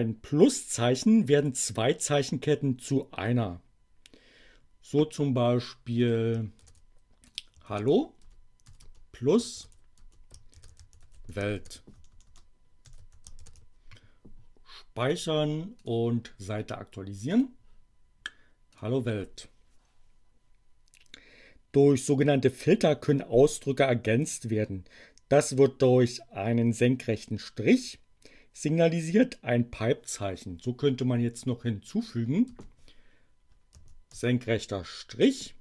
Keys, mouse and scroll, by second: 5.9 click, 6.6 shift+2, 7.2 click, 7.7 shift+2, 8.2 shift+space, 9.6-13.8 typing, 15.0 click, 15.8 click, 17.2 click, 18.7 click, 32.0 click, 32.5 space, 33.7 alt+<, 34.1 alt+space.